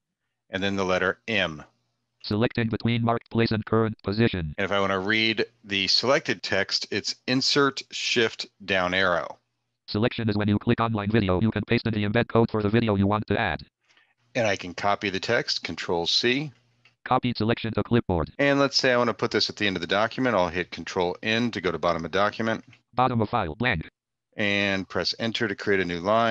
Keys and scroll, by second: 0.8 m, 6.9 shift+Down, 15.3 ctrl+c, 20.4 ctrl+End, 24.4 Return.